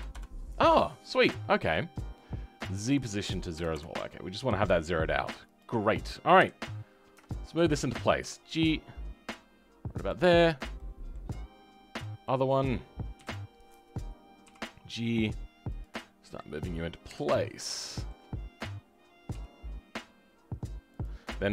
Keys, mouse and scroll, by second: 0.9-3.6 middle drag, 3.6-5.5 drag, 6.3 KP_3, 6.7-7.2 scroll up 2, 7.2 shift+middle click, 8.1 g, 10.3 scroll down 2, 10.7-11.9 middle drag, 11.9 click, 12.1 middle click, 13.1 KP_3, 14.4 g, 15.9-17.0 middle drag, 17.0 KP_1, 17.3 scroll up 2, 17.7-19.2 shift+middle drag, 19.2 g.